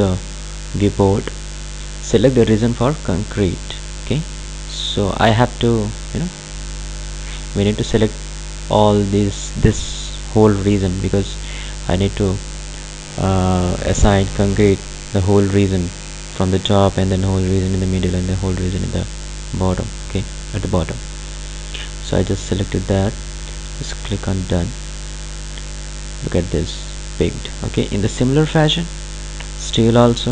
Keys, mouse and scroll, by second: 5.6 click, 24.3 click, 29.4 click.